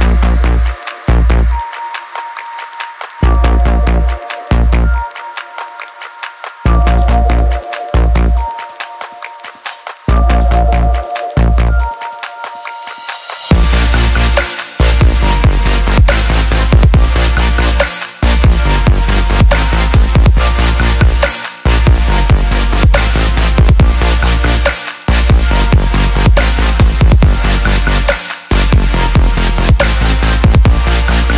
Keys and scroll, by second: 8.5-10.2 typing, 15.1-16.2 typing.